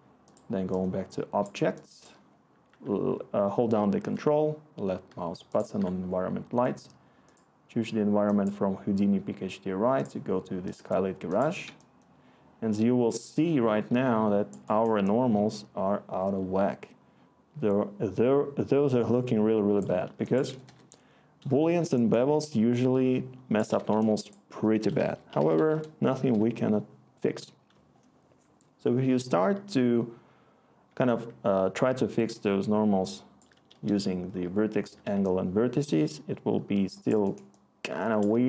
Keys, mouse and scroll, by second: 20.6-22.3 Return, 24.8 Tab, 25.0-26.1 typing, 26.2 Return, 33.1-35.1 scroll.